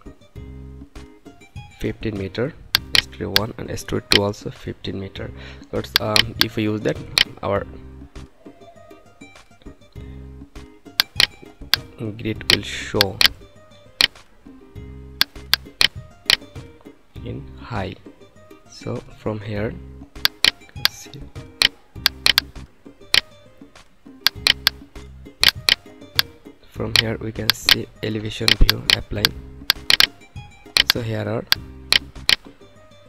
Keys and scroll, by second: 1.6 5, 3.8 1, 4.9 5.